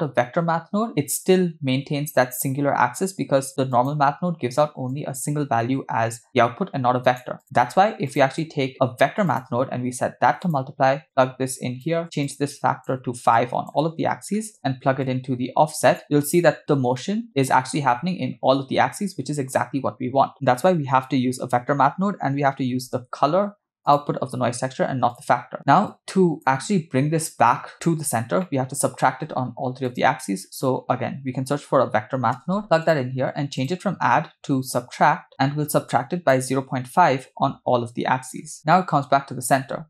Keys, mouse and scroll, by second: 3.7 click, 4.9-7.1 drag, 7.7 x, 8.1 click, 8.4-8.7 drag, 9.3-10.6 drag, 11.1-11.8 drag, 12.3 shift+click, 13.4-14.5 shift+drag, 15.0-16.0 drag, 17.0-17.8 middle drag, 23.9 click, 25.1 click, 25.9-26.5 drag, 28.4 middle click, 29.1 shift+a, 33.6-35.3 drag, 35.9-38.5 shift+drag, 38.7-39.8 middle drag.